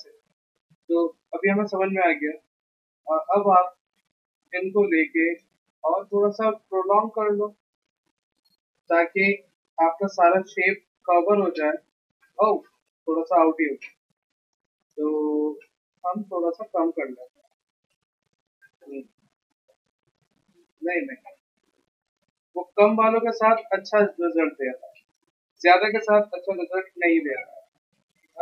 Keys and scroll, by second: 0.3 ctrl+z, 0.7 v, 2.6 t, 3.9 ctrl+a, 4.3 ctrl+c, 7.5 Return, 7.9 ctrl+v, 8.4 Return, 8.8 ctrl+v, 9.3 Escape, 11.1 ctrl+alt+c, 13.8 ctrl+z, 15.2 t, 17.3 Delete, 18.1 Escape, 20.0 ctrl+alt+c, 21.1 ctrl+z, 21.4 ctrl+z, 27.0 ctrl+alt+c, 27.9 ctrl+z.